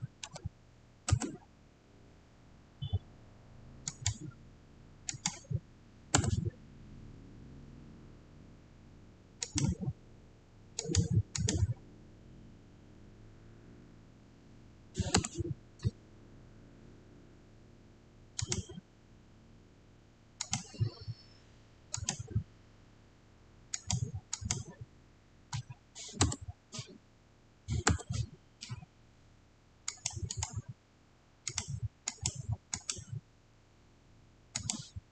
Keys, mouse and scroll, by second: 0.0-0.6 typing, 1.0 Return, 3.7 click, 6.0 Return, 9.3 click, 13.0-14.7 scroll down 1, 15.1 scroll down 1, 15.1 Return, 18.3 click, 20.3 click, 26.2 Return, 29.8 click, 30.2 right click, 31.3 click.